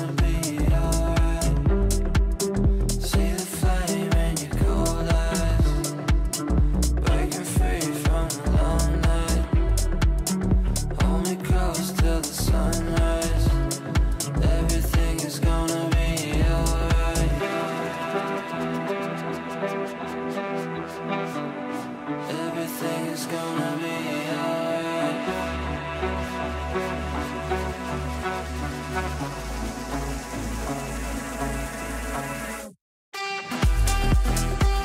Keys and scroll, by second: 12.0 shift+Page_Up, 24.6 Delete.